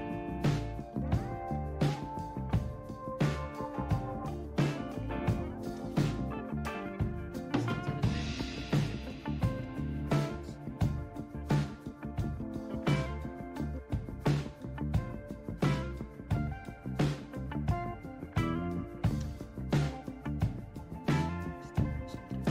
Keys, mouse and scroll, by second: 0.5-1.7 scroll down 1, 1.7-3.2 scroll down 1, 3.2-4.1 scroll down 1, 4.1-5.4 scroll down 1, 6.5-7.6 scroll down 2, 7.6-8.8 scroll down 1, 8.8-10.1 scroll down 1, 10.1-10.8 scroll down 1, 10.8-11.6 scroll down 1, 11.6-12.8 scroll down 1, 12.8-13.9 scroll down 1, 13.9-15.0 scroll down 1, 15.0-16.1 scroll down 1, 17.8-19.8 scroll down 1, 20.1-20.9 scroll down 1, 20.9-22.2 scroll down 1, 22.2-22.5 scroll down 1.